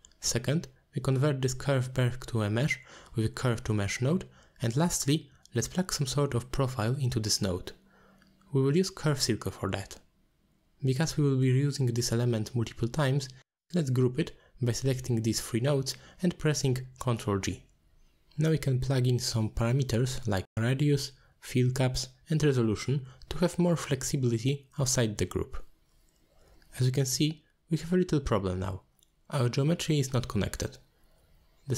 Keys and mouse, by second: 4.4 shift+a, 9.2-10.0 drag, 11.9-13.4 shift+drag, 14.5 click, 15.0 drag, 15.2-15.5 drag, 16.4 ctrl+g, 16.7 click, 17.6-18.5 drag, 18.6 click, 19.9-20.7 drag, 21.4-22.2 drag, 22.4 click, 23.3 click, 23.9 middle drag, 24.9-25.7 middle drag, 26.6-27.5 middle drag, 27.5 click, 28.0-28.4 middle drag, 30.1 middle drag, 31.1-31.4 middle drag.